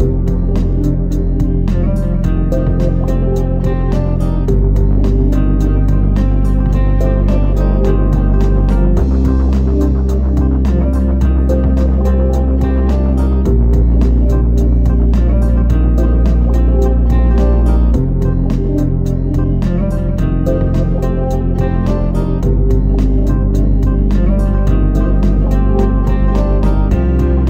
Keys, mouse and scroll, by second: 1.9-2.8 scroll down 4, 2.8 middle click, 3.4 shift+middle click, 3.4 shift+middle click, 5.8-6.3 scroll up 11, 7.1 click, 8.3 click, 13.5 KP_7, 14.6 shift+middle click, 16.3 g, 19.5 r, 24.3 middle click, 26.0 click.